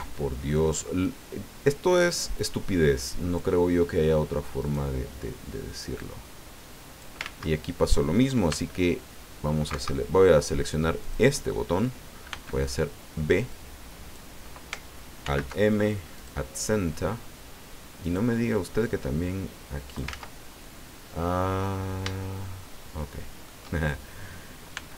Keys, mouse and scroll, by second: 0.1-3.5 drag, 4.6 right click, 6.0-7.2 drag, 7.2 ctrl+z, 8.5 b, 9.7 Escape, 11.0 click, 12.3 b, 13.5 click, 15.2 alt+m, 16.1 click, 18.0 right click, 18.8-20.2 drag, 20.1 ctrl+z, 20.6-23.6 ctrl+middle drag, 24.7 b.